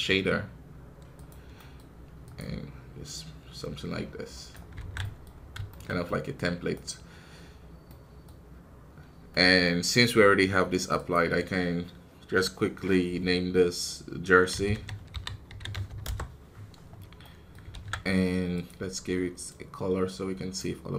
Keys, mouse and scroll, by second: 1.2 shift+s, 1.8-3.0 middle drag, 3.0 click, 4.7 alt+a, 4.9 middle click, 5.2-5.6 scroll up 2, 5.6-6.7 shift+middle drag, 6.7-16.0 right drag, 19.4 click.